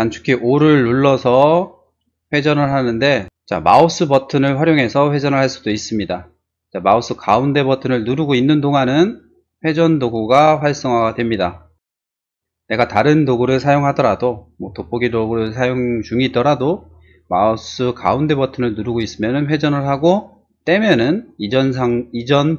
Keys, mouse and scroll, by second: 1.0 o, 1.6-3.1 drag, 5.4 space, 9.2 middle click, 9.9 middle click, 10.3 middle click, 10.9 middle click, 11.1 middle click, 14.7 z, 18.1 middle click, 18.4 middle click, 18.9-20.1 middle drag, 20.3 middle click.